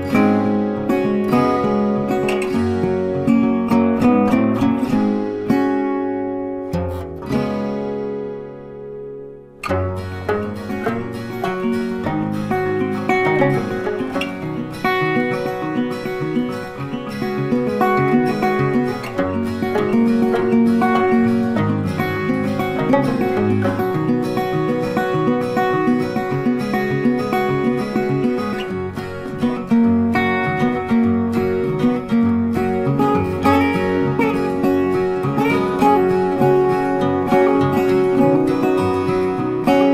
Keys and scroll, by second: 16.7 Right, 22.9 ctrl+t, 32.9 ctrl+t.